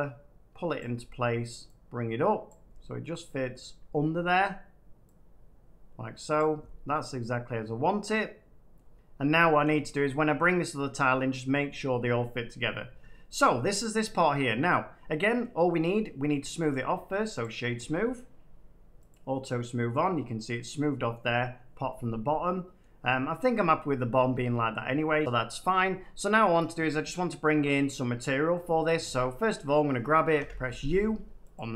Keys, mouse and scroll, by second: 0.7 click, 2.4 click, 3.4-5.0 middle drag, 6.3 click, 8.7 middle click, 9.2 middle click, 9.3 middle click, 9.8 shift+middle click, 12.8 Tab, 14.4 middle click, 15.9 middle click, 16.6 right click, 17.8 click, 19.0 click, 19.9 middle click, 21.1 middle click, 22.7 scroll, 24.9-25.5 scroll, 29.0 Tab, 30.3 u, 31.5 click.